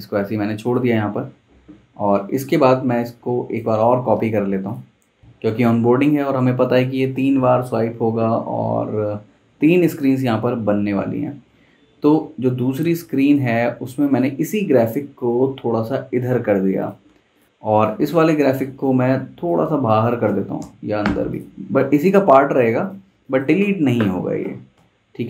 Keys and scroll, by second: 4.2 super+d, 17.4 super+z, 20.6 Left, 23.0 z, 23.6 v, 24.8 Right.